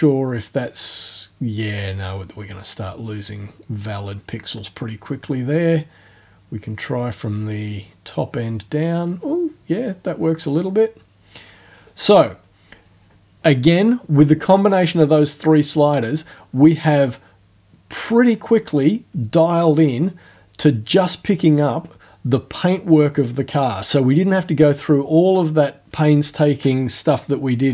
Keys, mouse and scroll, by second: 2.2-4.3 drag, 5.5-10.4 drag, 10.8-12.0 drag.